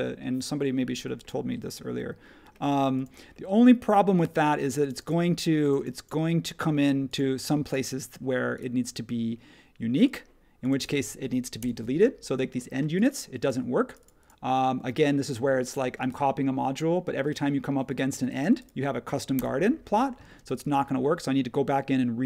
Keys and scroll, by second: 11.6 BackSpace, 19.3 BackSpace, 20.2 space.